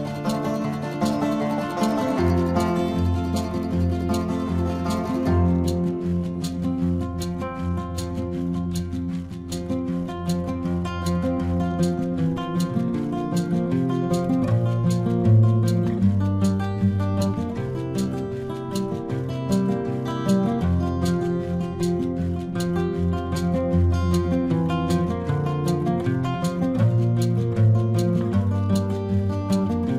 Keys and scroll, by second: 2.4 space, 3.9 ctrl+-, 4.2 space, 6.9 space, 9.1 ctrl+alt+z, 10.2 space, 13.1 space, 15.0 space, 16.8 space, 17.5 space, 18.6 ctrl+alt+z, 20.6 space, 22.5 ctrl+alt+z, 26.3 space, 27.6 space, 28.4 ctrl+alt+z, 29.4 ctrl+alt+z.